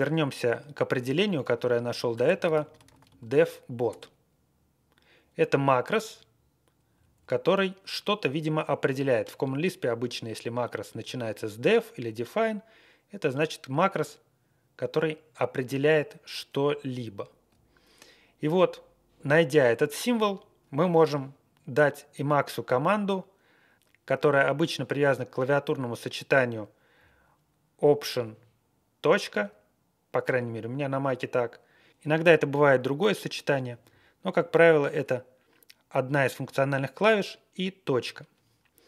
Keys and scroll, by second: 0.8 ctrl+w, 1.1 ctrl+w, 1.4 ctrl+w, 2.1-3.6 typing, 3.9 Return, 6.9 Left, 7.1 Left, 28.1 alt+..